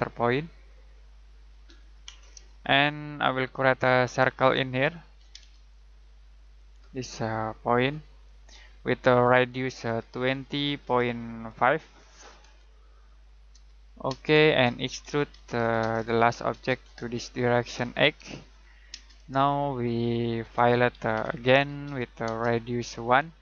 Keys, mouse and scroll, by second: 1.2 click, 1.6-2.3 scroll down 1, 2.5 shift+middle click, 3.5 middle click, 4.0-5.2 scroll up 1, 5.2 c, 5.3 space, 7.8 click, 9.8-10.4 typing, 12.1-12.9 typing, 15.0-16.5 typing, 18.1 8, 18.9 space, 20.5-22.3 typing.